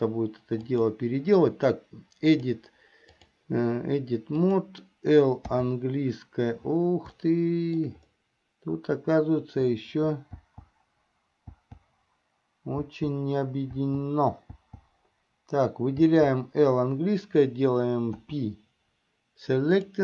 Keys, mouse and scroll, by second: 0.8 click, 2.4-3.7 drag, 4.5 click, 5.7 l, 7.4 shift+middle click, 10.6 l, 11.7 l, 13.0 l, 14.0 l, 14.7 l, 16.2 l, 18.3 p.